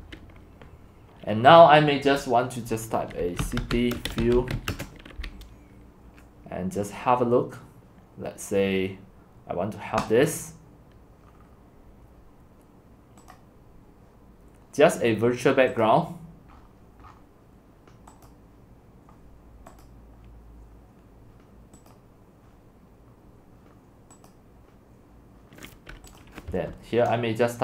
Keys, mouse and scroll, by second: 0.6 typing, 1.6-3.2 drag, 3.0-5.1 typing, 6.5 typing, 10.2-11.3 drag, 11.3-13.4 scroll down 5, 13.4-15.9 middle drag, 13.4 scroll, 15.9-16.6 drag, 16.6-18.1 middle drag, 16.6-18.3 scroll down 14, 18.3-26.3 drag, 26.5 click, 27.4-27.6 typing.